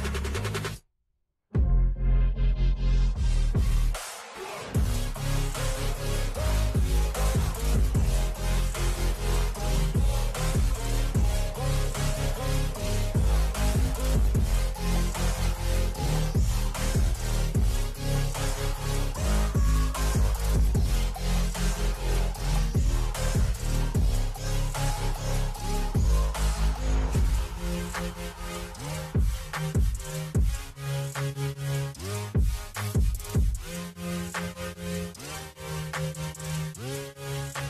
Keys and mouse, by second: 0.3 KP_0, 0.6 KP_Enter, 2.3 v, 4.6 click, 6.5 click, 7.8 click, 9.0-10.0 drag, 11.1 c, 12.0-15.7 drag, 17.0-19.8 drag, 20.2 v, 21.8 shift+Left, 22.0 shift+Left, 22.2 shift+Left, 22.5 shift+Left, 22.6 shift+Left, 23.4 shift+Right, 24.6 Return, 31.5 click, 36.3 click.